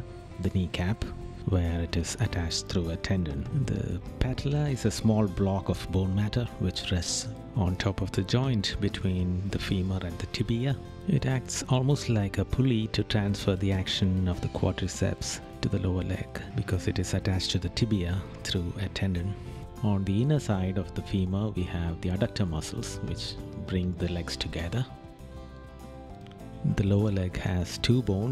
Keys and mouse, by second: 0.7 right click, 3.3 right click, 7.4 right click, 11.9 right click, 14.2 right click, 19.6 right click, 22.8 right click, 24.5 right click.